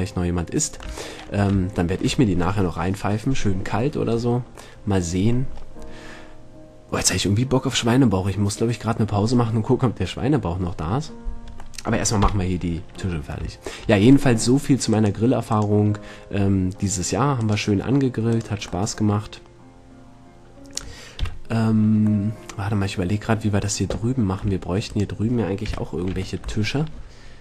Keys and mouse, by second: 0.7 middle click, 0.9 middle click, 1.3 middle click, 1.9 middle click, 2.0-2.5 middle drag, 2.7-4.5 middle drag, 4.9-5.7 middle drag, 7.7 middle click, 12.0 middle click, 12.4 KP_7, 15.1-15.8 right drag, 19.1-21.1 middle drag, 21.3 KP_7, 22.5-23.0 middle drag, 25.9 KP_7, 26.3 Tab.